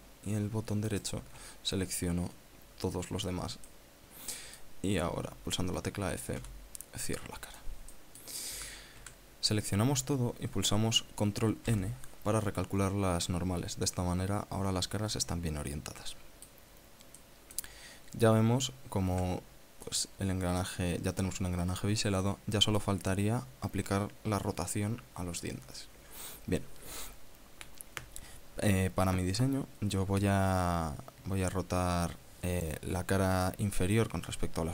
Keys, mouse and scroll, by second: 1.6 alt+shift+right click, 4.4-5.4 drag, 7.1 f, 7.7 click, 8.6 click, 9.2 a, 9.7 a, 12.4 ctrl+n, 14.0-17.4 drag, 17.5 scroll down 2, 17.8 click, 19.8 a, 20.6-23.6 drag.